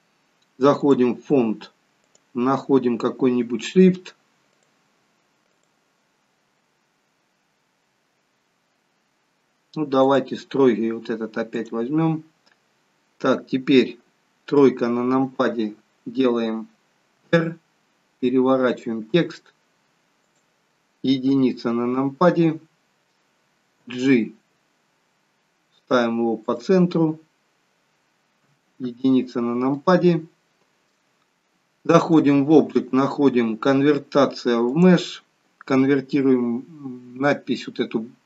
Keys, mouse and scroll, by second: 0.7 click, 2.0 click, 14.5 KP_3, 17.1 r, 21.1 KP_1, 23.8 g, 28.4 KP_1, 29.6 shift+middle click, 31.2 Tab, 31.2 click, 34.8 click.